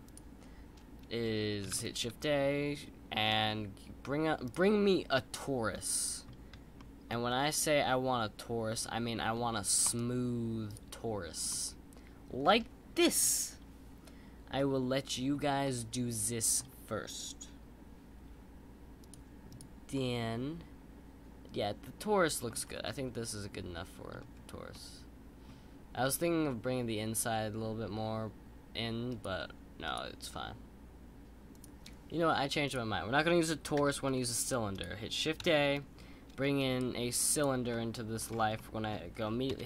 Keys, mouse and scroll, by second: 1.7 shift+a, 5.1-9.4 middle drag, 9.4-9.8 scroll up 1, 9.8-11.5 right drag, 11.5-18.6 middle drag, 19.0-19.6 drag, 19.9-22.6 middle drag, 22.6 scroll down 3, 22.8-24.2 middle drag, 24.2-24.7 scroll up 2, 24.7-27.2 middle drag, 29.9-31.7 drag, 35.4 shift+a, 37.7-38.2 middle drag, 38.2-38.5 scroll down 4, 38.5 middle click, 39.5 KP_1.